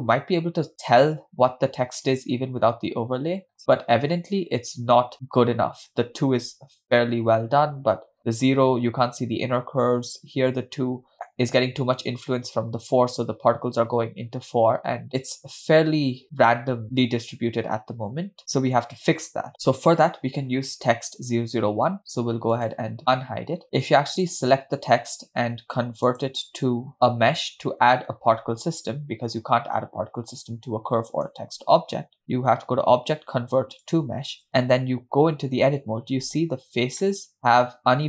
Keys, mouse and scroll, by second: 2.8 click, 3.7-4.4 scroll up 2, 15.3 click, 22.7 click, 23.1 click, 23.8 click, 26.2-27.7 drag, 31.2-34.3 drag, 35.2 Tab, 36.3-36.9 scroll up 2, 37.1 shift+middle click.